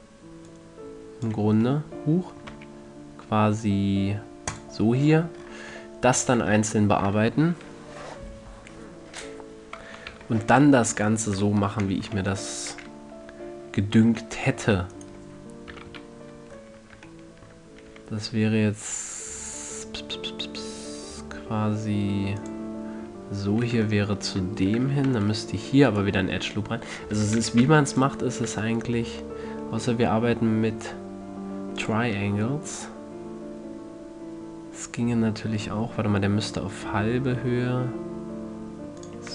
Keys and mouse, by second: 0.8-3.0 drag, 2.9 x, 10.5 KP_3, 15.3 middle click, 16.1 KP_1, 16.2 KP_3, 18.3 e, 22.8 click, 24.3-25.4 middle drag, 25.4 ctrl+r, 26.3-28.0 drag, 27.5 z, 28.0 c, 28.8 e, 32.2-34.0 drag, 32.5 e.